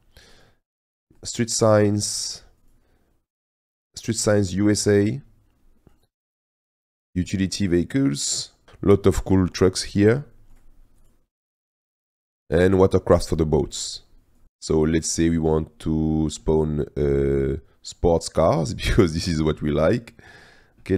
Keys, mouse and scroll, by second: 2.4-4.6 drag, 5.7-20.9 drag.